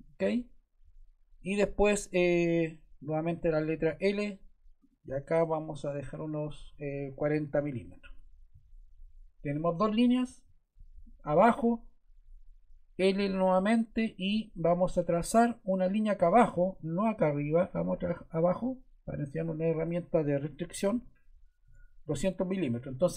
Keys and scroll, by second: 3.2 l, 7.0-8.0 typing, 8.0 Return, 13.1 l, 20.3 2, 20.7 0, 21.6 Return, 22.5 Escape.